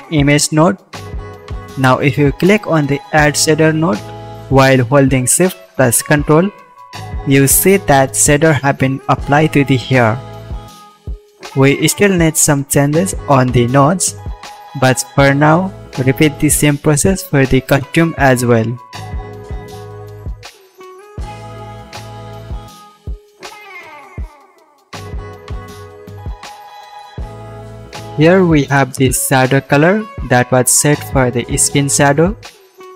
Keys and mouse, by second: 0.8 x, 1.9 x, 7.4 click, 8.3 click, 8.8 ctrl+v, 10.0-11.6 drag, 15.9 ctrl+click, 20.6 ctrl+shift+click, 20.7 ctrl+shift+middle click, 20.7 ctrl+shift+right click, 21.0-23.6 drag, 23.6 Delete, 24.5 shift+click, 25.1 shift+click, 26.0-30.4 shift+drag, 30.4 middle click, 30.6-31.9 drag, 31.9 middle click, 32.1-32.9 drag.